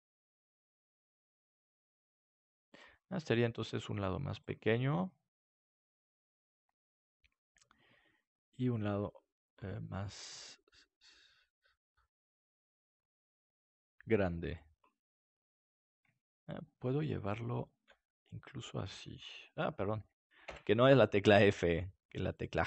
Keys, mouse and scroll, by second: 3.2-6.0 drag, 3.2-10.9 right drag, 3.5 g, 8.8 g, 9.5-10.9 drag, 10.2 g, 14.5-20.7 drag, 15.4-17.3 right drag, 18.5-20.7 right drag, 18.8 f, 21.3 g, 22.0-22.6 drag, 22.3-22.6 right drag.